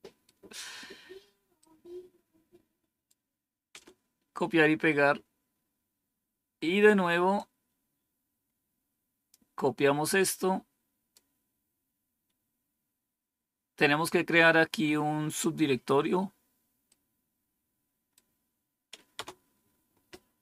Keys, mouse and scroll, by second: 1.5-3.0 right drag, 3.6 Return, 5.0-7.2 scroll down 3, 7.2-9.2 drag, 10.1-11.1 right drag, 16.8 right click, 19.0 Return.